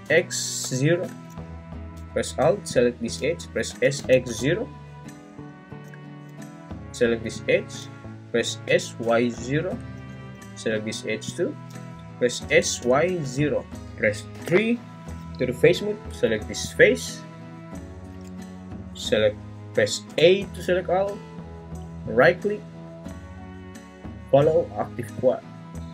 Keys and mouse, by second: 0.1 x, 0.6 0, 1.6 Return, 3.7 s, 3.9 x, 4.3 0, 6.4 Return, 8.6 s, 9.1 y, 9.3 0, 9.6 Return, 12.4-14.3 typing, 13.6 Return, 20.1 a, 22.5-25.4 right drag.